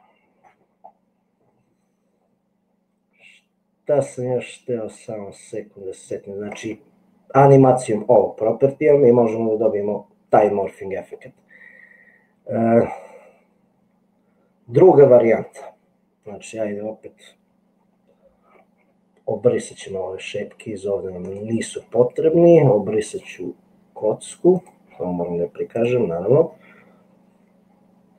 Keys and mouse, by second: 5.2-6.6 middle drag, 8.6-10.4 drag, 19.7 click, 25.7 click.